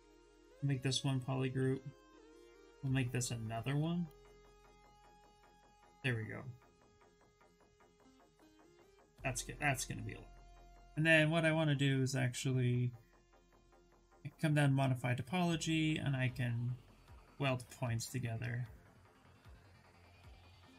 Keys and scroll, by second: 1.2 ctrl+shift+z, 2.2 ctrl+q, 2.2 ctrl+w, 3.3 ctrl+w, 4.0 ctrl+w, 19.4 shift+f.